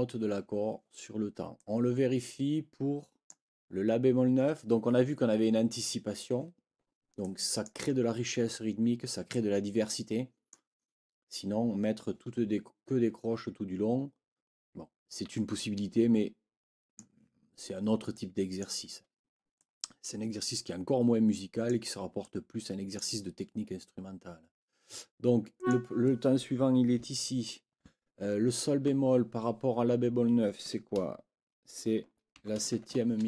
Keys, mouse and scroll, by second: 1.6-3.4 drag, 7.2 click, 9.3-10.7 drag, 15.5-17.1 drag, 18.1 click, 19.6-21.8 drag, 22.2 click, 25.5 click, 27.4 ctrl+l, 32.4 shift+b.